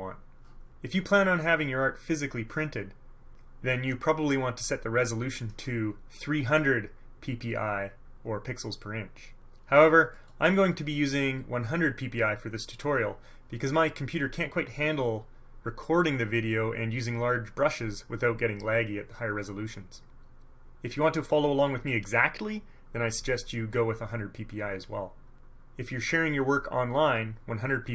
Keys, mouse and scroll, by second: 10.3 middle click, 10.7-11.3 scroll down 2, 11.5-12.4 scroll down 4.